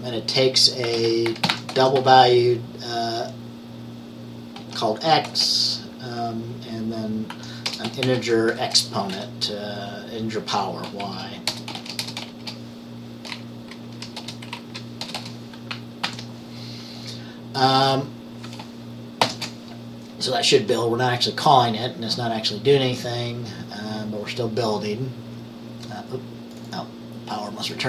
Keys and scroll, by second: 0.7-2.6 typing, 5.4 typing, 7.4-9.2 typing, 11.1-12.4 typing, 12.1 Return, 14.0 Up, 14.3 Return, 14.6 Down, 15.1 Return, 15.3 Return, 15.9 typing, 16.2 ctrl+s, 19.3 ctrl+b.